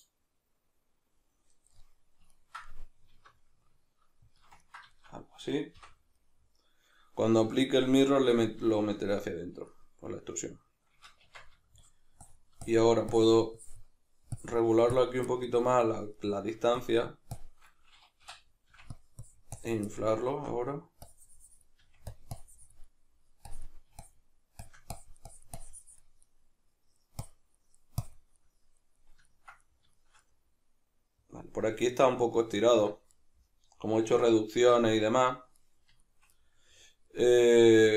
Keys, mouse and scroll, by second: 0.0-0.4 scroll down 1, 1.9 middle click, 3.1 alt+s, 4.4 shift+click, 4.9-11.8 shift+middle drag, 5.8 o, 11.3 Tab, 11.8-15.3 shift+drag, 15.3-16.8 middle drag, 16.8-19.0 shift+drag, 19.2 click, 19.9-21.1 middle drag, 21.1-22.2 drag, 21.8 f, 22.3 click, 22.9 middle click, 23.5-26.3 drag, 26.3 middle click, 27.2 click, 27.5 middle click, 28.0 click, 28.4-37.9 middle drag.